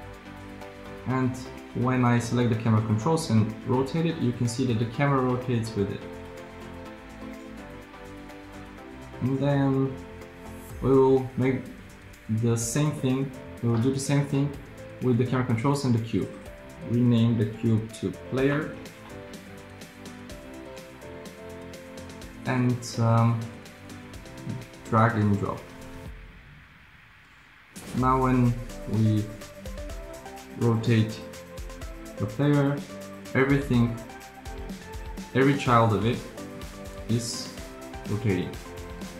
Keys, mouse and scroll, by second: 3.9 r, 30.9 r.